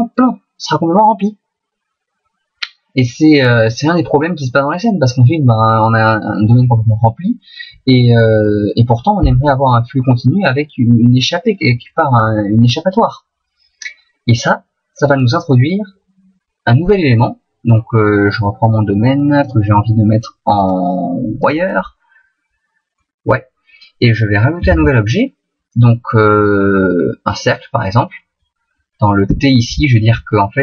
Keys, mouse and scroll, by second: 19.4 click, 20.6 click, 23.0 middle click, 24.8 shift+a, 28.4 middle click, 29.2 t.